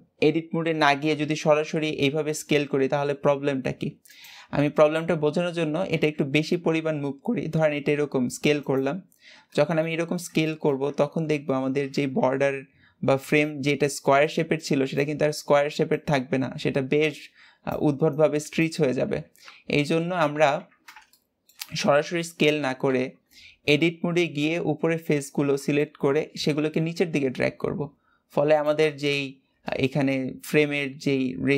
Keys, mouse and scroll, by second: 0.9 s, 4.4-5.8 scroll down 4, 5.8 s, 8.9 scroll up 2, 9.4-10.0 shift+middle drag, 10.4-10.8 shift+middle drag, 10.8-11.4 scroll up 1, 19.5 scroll down 2, 20.3 ctrl+z, 21.0-22.8 shift+middle drag, 22.8 Tab, 23.2 scroll up 3, 25.7 shift+middle click, 26.2 g, 28.8-29.1 scroll up 2, 29.8 shift+middle click, 30.2-31.5 scroll up 1.